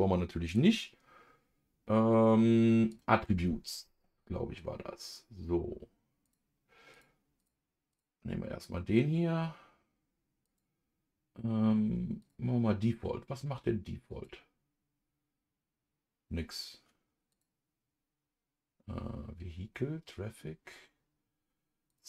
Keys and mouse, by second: 0.5-3.0 drag, 6.2 click, 6.9 click, 7.4 click, 10.4-12.3 drag, 14.1 click, 17.3-22.0 drag.